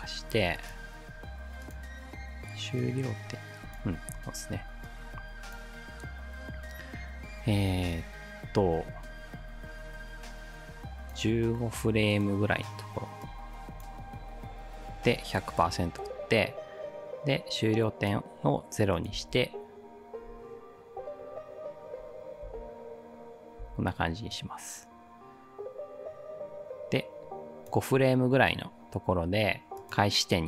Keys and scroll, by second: 4.2 ctrl+z, 19.2 space, 22.4 space, 23.6 space.